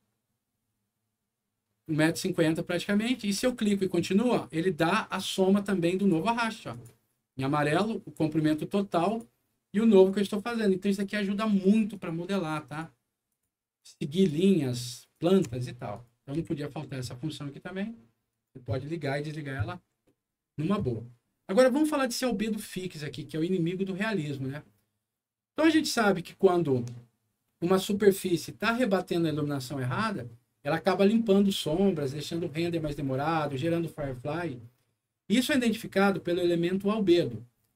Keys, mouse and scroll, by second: 3.3 shift+click, 5.9 shift+click, 6.6 shift+click, 7.6 shift+click, 9.0 shift+click, 9.9 shift+click, 10.8 shift+click, 11.9 shift+click, 12.6 shift+click, 13.2 shift+click, 13.7 shift+click, 14.1 shift+click, 15.1 shift+click, 15.9 shift+right click, 16.3 w, 18.2 click, 20.0 middle click.